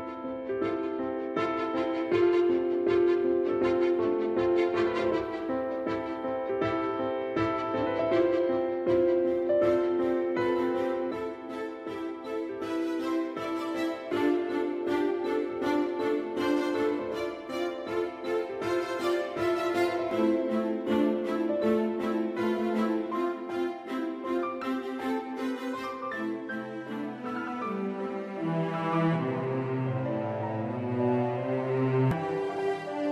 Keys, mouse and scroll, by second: 2.6 click.